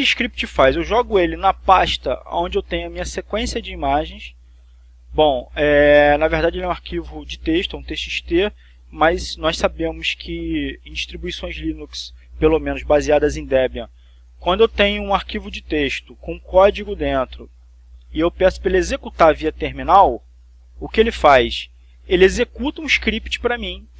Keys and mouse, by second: 6.3 click, 17.1 right click.